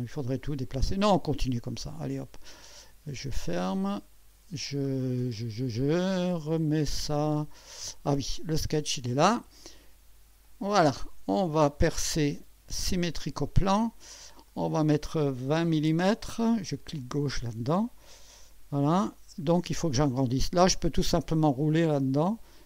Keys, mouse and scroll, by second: 1.6 click, 3.5 click, 4.4-4.7 scroll down 1, 7.0-8.4 drag, 10.4 click, 13.4 click, 14.5 click, 15.4-16.4 typing, 17.0 click, 18.4 1, 20.7 scroll up 2, 21.2 scroll up 2, 21.7 scroll up 2, 22.4-22.6 scroll up 2.